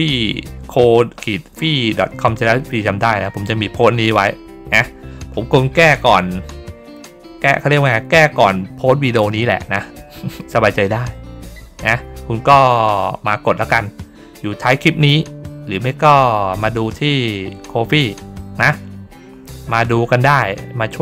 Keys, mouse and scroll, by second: 1.7 scroll down 2, 2.7 scroll down 2, 3.7 scroll down 2, 10.3-10.7 scroll down 2, 10.7-11.1 scroll up 2, 11.3 scroll down 2, 11.7-12.2 scroll up 2, 12.8 scroll up 2, 16.8-17.3 scroll up 4, 18.3 middle click, 18.8 middle click, 20.3 middle click, 20.4 middle click.